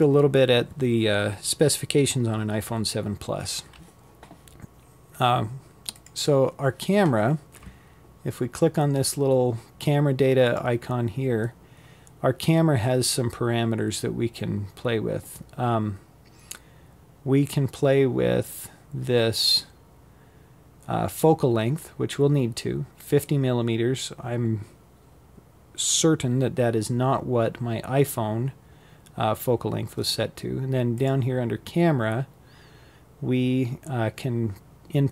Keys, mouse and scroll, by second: 3.5 click, 8.1 click, 28.6 click.